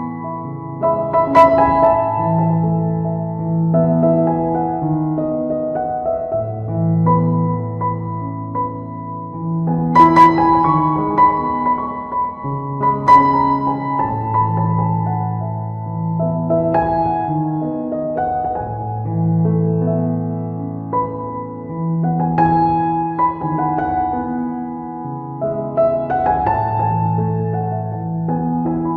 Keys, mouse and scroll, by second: 0.8 right click, 1.2 f, 1.5 click, 3.1 ctrl+z, 3.4 click, 5.3 shift+middle click, 5.5 f, 6.0 click, 8.9 ctrl+z, 9.3 middle click, 10.3 right click, 11.1 click, 12.7 click, 14.5 shift+click, 16.9 click, 18.6 right click, 19.0 click, 19.4 click, 20.0 click, 20.8 middle click, 21.1 right click, 21.8 click, 23.5 click, 24.3 click, 26.0 click, 27.1 middle click, 27.8 ctrl+middle click, 28.3 middle click, 28.9 middle click.